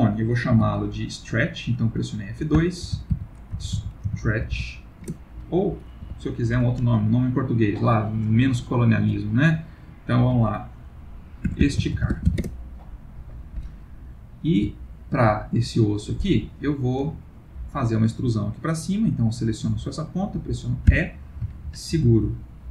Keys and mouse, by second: 0.5 F2, 6.0 F2, 14.8 ctrl+middle click, 15.6 shift+middle click, 16.3 middle click, 17.5 click, 18.3 middle click, 18.4 middle click, 20.9 e.